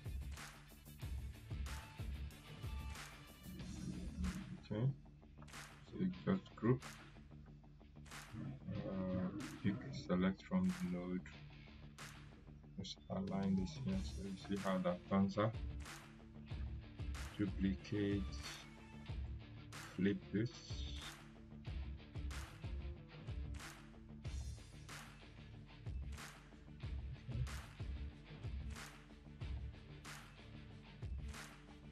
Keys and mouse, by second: 6.3 ctrl+g, 6.8-13.5 drag, 15.8 click, 16.5 ctrl+right click, 19.2-22.7 drag, 23.0 ctrl+z, 25.0-31.8 drag, 31.5 right click.